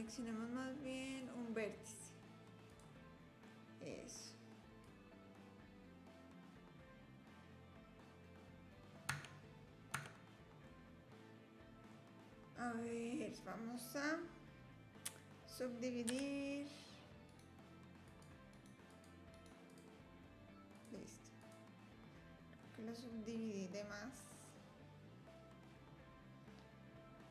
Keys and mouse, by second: 1.1-2.3 drag, 2.7 click, 3.5 click, 4.9-8.8 drag, 9.1 Tab, 9.9 Tab, 10.6-11.9 drag, 16.1 a, 17.4 click, 18.6 click, 19.5 click, 20.7 click, 22.6 click, 24.5-27.3 drag.